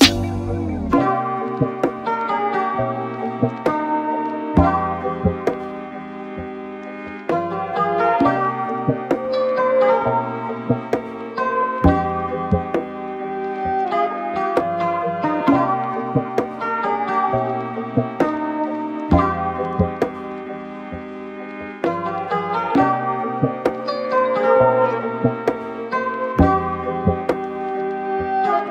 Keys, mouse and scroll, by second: 0.3 middle click, 1.1-1.9 scroll up 1, 1.9 drag, 2.2-4.0 middle drag, 4.0-4.5 scroll up 3, 4.6-5.1 scroll down 1, 5.1-5.7 middle drag, 5.7 scroll down 1, 6.1 click, 6.7-7.2 shift+middle drag, 7.2 click, 7.5-8.0 scroll up 2, 8.0-9.3 scroll up 4, 9.7-11.2 middle drag, 11.2-12.0 scroll down 2, 12.0-12.5 scroll down 3, 12.5-13.2 scroll down 1, 13.2-13.9 scroll down 2, 13.9-14.9 shift+middle drag, 14.9-15.3 scroll up 2, 15.8 KP_Divide, 16.2 middle click, 16.8-17.7 scroll up 1, 17.7 click, 22.2 0, 24.3-25.3 scroll down 3, 28.2 click.